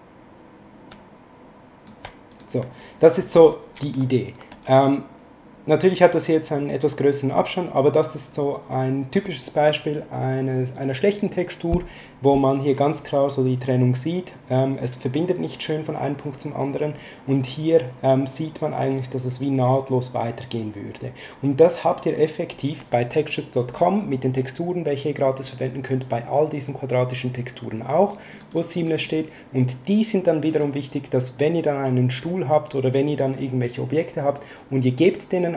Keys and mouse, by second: 0.9 ctrl+shift+click, 2.3 click, 22.1 click, 28.3 click, 30.5 click.